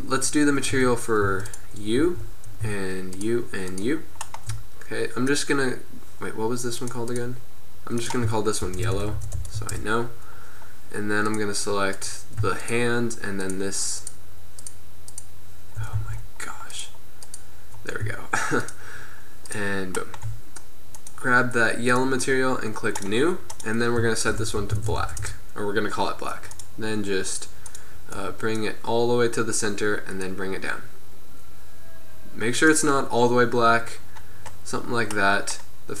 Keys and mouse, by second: 0.0-0.9 middle drag, 0.9 Tab, 1.4 Tab, 2.1 z, 2.2-3.3 right drag, 5.4-6.9 middle drag, 9.2 l, 16.1 a, 21.1-23.2 middle drag, 23.2-25.5 drag, 26.6-28.5 drag.